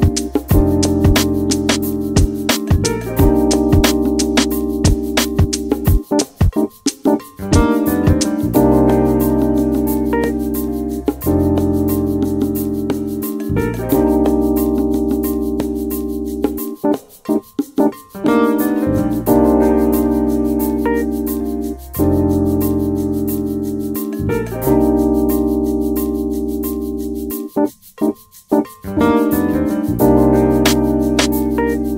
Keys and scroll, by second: 18.7-19.1 typing, 19.7 Return.